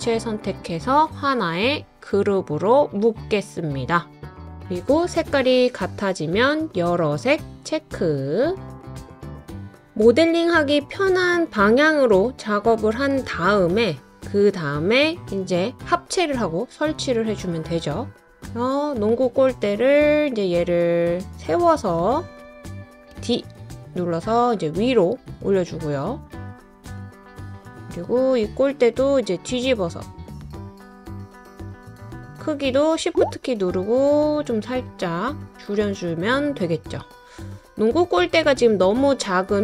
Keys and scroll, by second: 23.1 d.